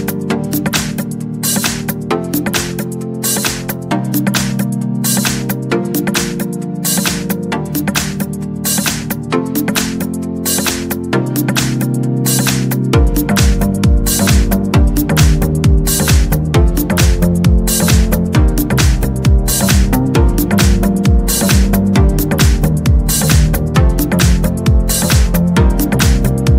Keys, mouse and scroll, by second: 0.0 click, 0.5 click, 2.3 click, 3.9 click, 5.2 click, 6.0 click, 8.5 click, 9.6 click, 11.2 click, 14.7 click, 15.6 scroll up 1, 15.9-17.6 scroll down 2, 17.6 click, 20.0 click, 20.8 scroll down 1, 21.3-21.8 scroll up 1, 21.9 scroll down 1, 22.5 scroll down 2, 24.3 scroll up 2, 25.8 click.